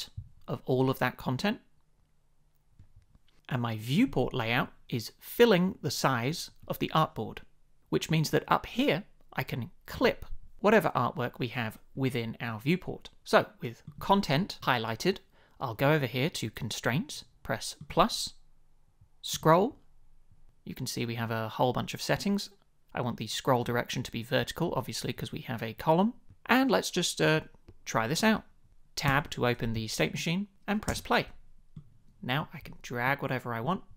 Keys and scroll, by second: 29.0 Tab, 30.8 space.